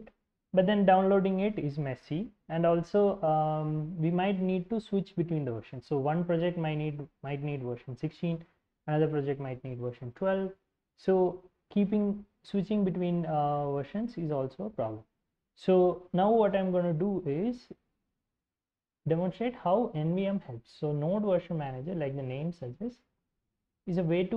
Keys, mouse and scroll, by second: 0.2 click, 0.8 alt+Tab, 15.7-18.4 typing, 23.1 ctrl+i.